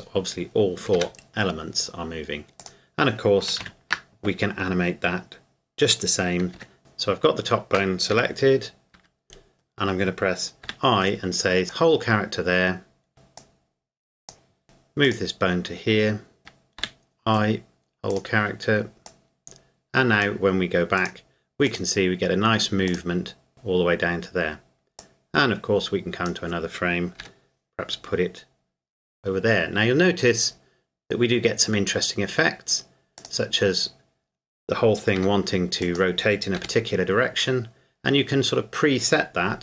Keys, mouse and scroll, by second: 1.0 g, 2.6 click, 3.6 ctrl+z, 6.8 click, 8.1 g, 9.0 Escape, 11.6 click, 14.6 g, 15.1 click, 16.8 i, 18.1 click, 25.0 click, 27.2 g, 33.2 click, 35.1 r, 35.8 click, 36.6 g.